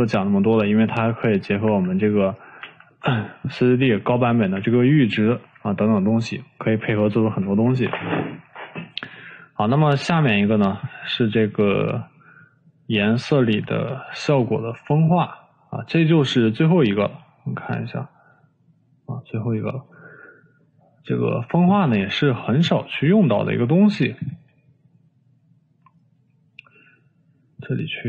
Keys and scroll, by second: 2.3 Delete, 3.3 Delete, 5.2 Delete.